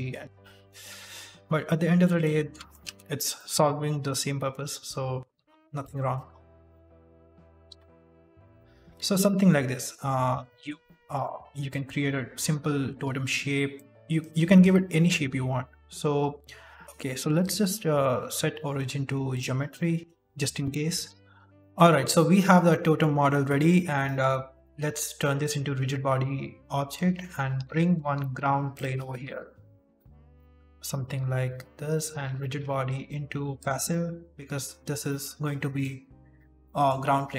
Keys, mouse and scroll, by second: 0.0 KP_Decimal, 0.0 scroll down 6, 0.3 middle click, 0.8 g, 2.4 scroll down 1, 2.7 shift+middle click, 3.3 middle click, 4.0 shift+middle click, 4.2 scroll down 2, 4.6 ctrl+r, 6.3 scroll down 2, 6.6 shift+middle click, 6.8-7.1 scroll up 2, 7.6 ctrl+r, 8.6-8.9 scroll down 5, 8.9 Tab, 9.1 middle click, 10.0 scroll up 2, 10.4 shift+middle click, 10.7 middle click, 11.2 w, 12.0 middle click, 12.9 Tab, 13.6 right click, 14.1 right click, 14.5 alt+right click, 15.2 s, 16.8 alt+g, 16.8 middle click, 16.8 scroll up 2, 16.8 KP_1, 17.3 click, 19.7 middle click, 20.5 scroll up 1, 20.7 scroll down 3, 21.0 g.